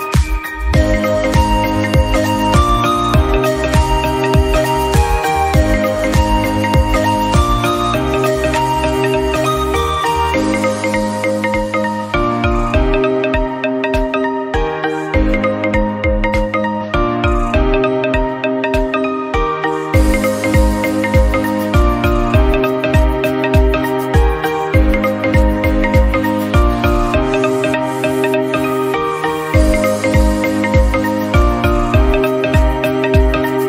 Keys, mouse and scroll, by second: 0.2 Tab, 0.3 scroll down 1, 0.5 drag, 0.7-2.7 middle drag, 2.7 scroll down 2, 2.8-3.6 middle drag, 3.6 scroll up 2, 3.7-4.2 shift+middle drag, 4.2 click, 4.3 Tab, 4.4 scroll up 2, 4.6-5.6 shift+middle drag, 5.6 click, 6.5 2, 6.6 click, 7.5 middle click, 8.4 shift+click, 8.6 middle click, 9.2-11.1 drag, 11.2 Tab, 11.4 scroll down 1, 11.6 middle drag, 11.8 click, 11.9-12.7 middle drag, 12.7 scroll up 3, 12.9-13.5 middle drag, 13.5-13.8 scroll down 5, 13.8 middle drag, 14.0 scroll up 1, 14.2-15.2 middle drag, 15.2 scroll down 3, 15.2-16.3 middle drag, 16.3-16.7 scroll up 3, 16.8 shift+middle click, 17.2-17.6 scroll up 1, 17.6 scroll down 3, 17.8 shift+middle click, 18.3 KP_7, 18.6-18.9 scroll down 1, 19.1 click, 19.2 shift+a, 21.1 middle click, 21.5 /, 21.7 scroll down 4, 21.9-22.2 middle drag, 22.2 s, 23.2 scroll up 2, 23.3 shift+middle click, 23.8 Tab, 23.9 middle click, 24.3 3, 24.4 click, 24.6 shift+middle click, 24.9 shift+click, 25.0 shift+middle click, 25.8 Tab, 26.8 ctrl+z, 27.0 ctrl+z, 28.0 Tab, 28.1 click, 28.5-30.2 drag, 30.2 Tab, 30.7 Tab, 31.1 a, 31.3 click, 31.6 ctrl+a, 31.9 Tab, 32.3 ctrl+b.